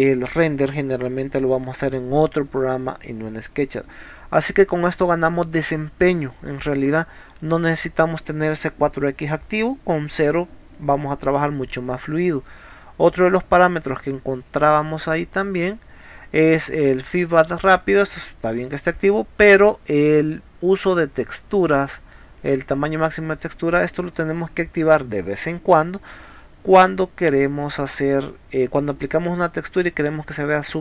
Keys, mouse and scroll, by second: 6.4-6.7 scroll down 2, 6.9 scroll down 2, 8.4 scroll up 2, 12.5 click, 14.5 click.